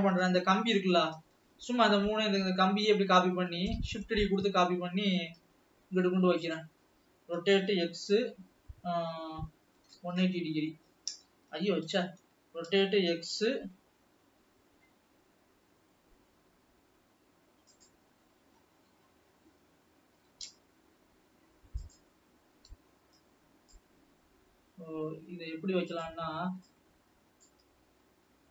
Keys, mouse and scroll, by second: 0.7 l, 1.2 l, 1.4-1.9 l, 2.1-2.6 scroll up 1, 2.6-3.5 scroll down 5, 4.0 shift+d, 7.6 r, 12.1 ctrl+z, 13.0 r, 18.8 KP_3, 20.3 g, 22.3-23.2 scroll up 2, 23.2 click, 24.0-24.5 scroll up 4, 25.1 scroll up 1, 26.0 click, 26.6 click.